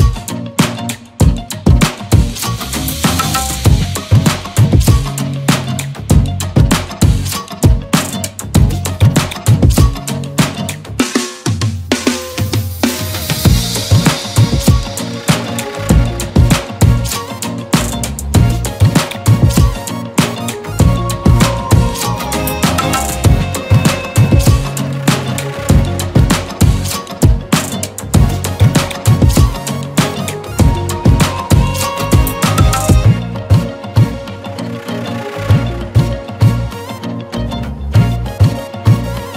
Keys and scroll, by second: 0.9 ctrl+z, 1.8 ctrl+z, 2.6 ctrl+z, 7.6 ctrl+z, 8.7 ctrl+z, 9.7 ctrl+z, 16.7 e, 17.4 b, 19.8 e, 20.2 b, 21.9 space, 23.1 space, 23.6 ctrl+z, 26.1 e, 26.6 b, 27.3 ctrl+z, 27.9 e, 28.4 b, 30.0 ctrl+z, 31.9 e, 33.1 e, 35.2 e, 35.6 b, 36.6 ctrl+z, 38.5 e, 39.1 b.